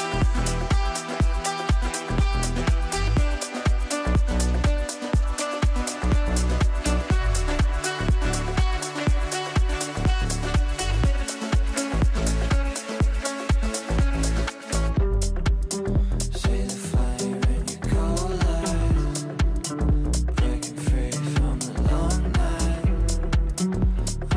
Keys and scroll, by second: 21.4 r.